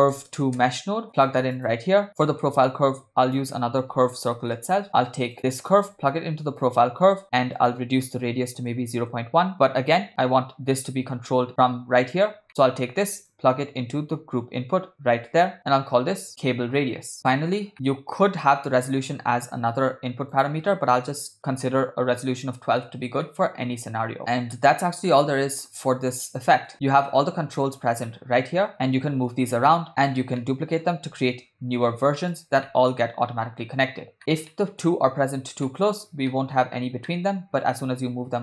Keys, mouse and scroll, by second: 1.0 BackSpace, 2.3 middle click, 2.7 shift+a, 5.6-6.9 drag, 7.6-9.2 drag, 12.5 middle click, 13.3-15.7 drag, 16.8-17.2 drag, 17.3 middle click, 17.7 middle click, 18.4 ctrl+middle click, 20.4-21.9 drag, 23.3-24.5 middle drag, 25.1-26.7 middle drag, 28.7 click, 29.3 g, 30.4-30.9 middle drag, 31.5 shift+d, 32.7-33.9 middle drag, 34.5-34.9 shift+middle drag, 35.7-36.0 middle drag, 36.3 ctrl+middle drag, 37.1 ctrl+middle click, 37.6 g.